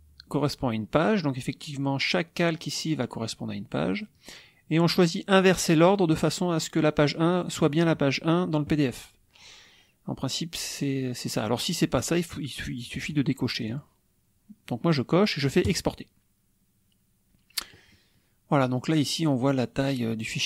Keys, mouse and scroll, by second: 3.8 click, 5.3 click, 13.0 click, 13.7 click, 15.5 click, 19.3 click.